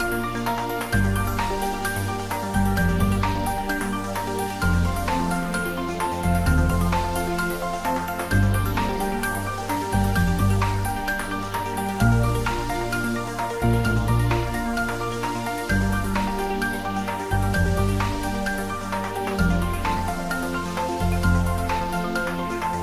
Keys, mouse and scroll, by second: 0.4 3, 0.8 click, 2.3 3, 3.0 scroll down 1, 4.0-7.2 middle drag, 7.2 scroll up 1, 7.5 middle click, 8.5 scroll up 1, 9.5-11.0 middle drag, 11.0 e, 12.7 click, 13.6 ctrl+b, 15.3 click, 15.9 Tab, 16.4 scroll down 1, 17.4 middle click, 17.5-19.3 middle drag, 19.3-19.6 scroll down 1, 20.1 middle click, 20.6-21.8 scroll down 1, 21.8 Tab, 22.6 click.